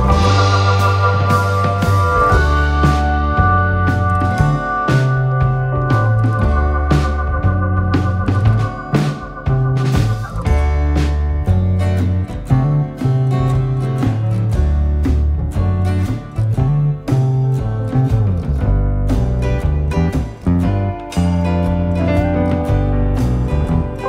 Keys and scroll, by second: 5.9 9, 8.6 BackSpace, 8.8 -, 10.4 6, 10.5 ., 10.7 5, 12.1 Left, 13.6 Return, 14.7 BackSpace, 18.4 BackSpace, 20.9 Return.